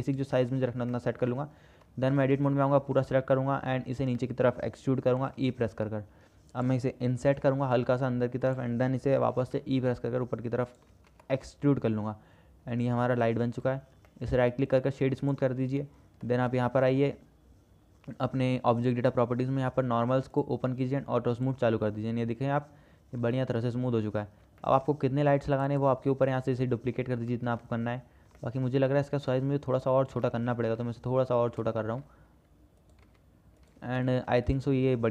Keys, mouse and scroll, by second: 1.2 shift+drag, 2.4 Tab, 2.9 a, 3.6 shift+click, 4.4 shift+click, 5.2 e, 11.2 Tab, 13.4 shift+click, 14.4 shift+click, 16.0 shift+click, 20.6 click, 21.7 click, 23.6-23.9 shift+drag, 24.8 shift+click, 27.6-27.9 middle drag, 28.6-29.1 shift+middle drag, 29.5-29.9 drag, 29.9 middle click, 30.5 shift+middle click, 31.5 s, 33.3 s, 34.6 KP_0, 34.7 KP_0.